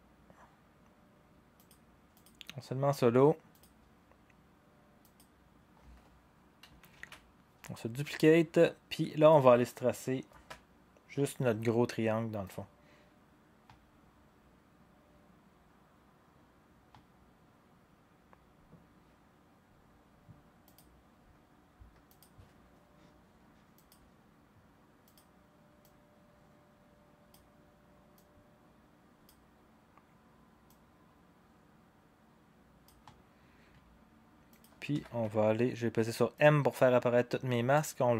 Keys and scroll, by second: 6.9 ctrl+d, 34.6-35.4 typing, 36.7-37.4 typing.